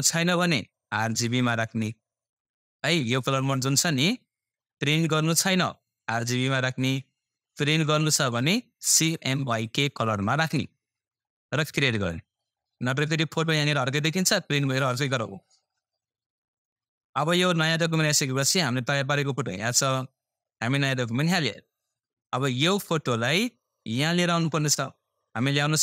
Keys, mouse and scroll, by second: 3.3 click, 10.4 click, 17.6-17.9 scroll down 1, 17.9 typing, 18.6-18.9 scroll up 1, 19.5 click, 25.1 typing.